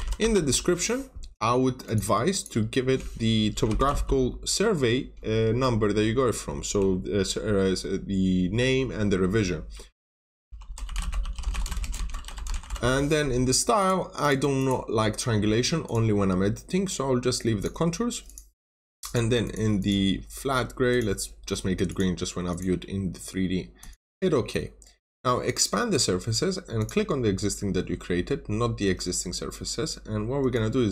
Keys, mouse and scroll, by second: 0.0-0.6 typing, 1.8 click, 2.2 double click, 3.2-4.3 typing, 10.1-13.5 typing, 13.7 click, 14.1 double click, 15.8 click, 19.3 double click, 20.8 click.